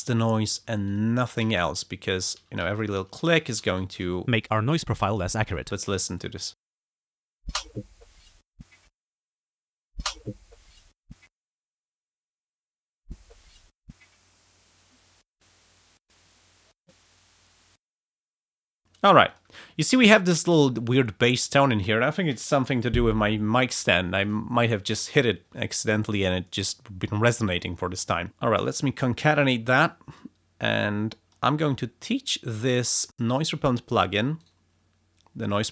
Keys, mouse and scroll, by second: 0.3 shift+click, 0.7 s, 0.9 click, 1.3 s, 1.5 shift+right click, 2.2 shift+click, 2.4 shift+s, 2.7 shift+click, 3.3 shift+click, 3.4 shift+s, 3.7 shift+right click, 4.2-4.5 ctrl+shift+scroll down 2, 5.0 ctrl+click, 5.4 ctrl+scroll up 2, 5.9-7.1 ctrl+scroll up 8, 6.3 ctrl+space, 6.5 ctrl+f, 7.4 ctrl+space, 8.8 space, 9.2 click, 9.5 ctrl+scroll up 2, 10.0 ctrl+space, 11.2 space, 11.7 click, 12.5 click, 12.7 space, 18.1 space, 19.3 click, 28.4 click, 29.4 click, 30.2-31.5 drag, 31.7 click, 32.3 click.